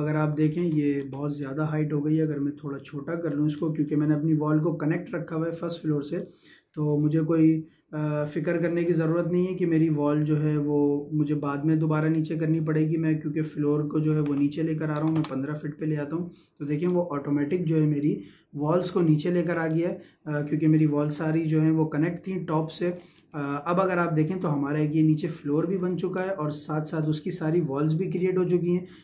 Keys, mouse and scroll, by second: 1.0 scroll down 1, 2.1 click, 3.3 scroll down 1, 3.5 middle click, 5.6 scroll up 1, 6.2 click, 15.0 ', 15.1 Return, 16.9-17.6 scroll up 1, 18.8 click, 19.8-23.1 shift+middle drag, 23.1 scroll up 1, 23.5-25.8 shift+middle drag, 25.8 click, 26.2-28.7 shift+middle drag, 28.7 Escape.